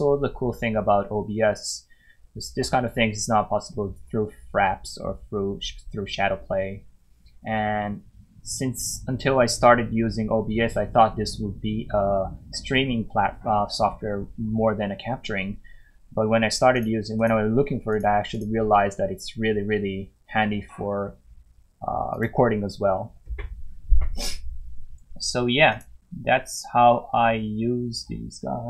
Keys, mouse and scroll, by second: 16.7 click, 22.1 click, 25.7 click.